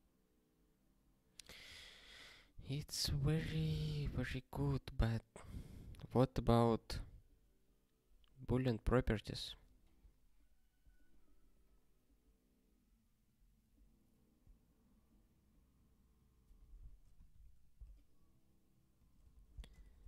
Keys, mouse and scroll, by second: 17.2 ctrl+s, 18.9 click, 19.3 ctrl+b, 19.6 space, 19.7 ", 19.9 ".